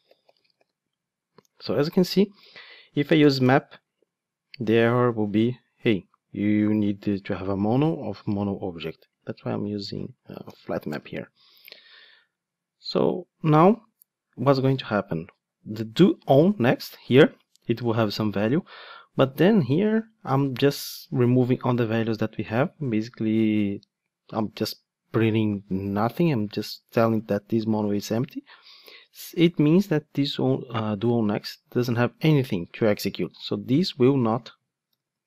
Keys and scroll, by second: 10.9 Return.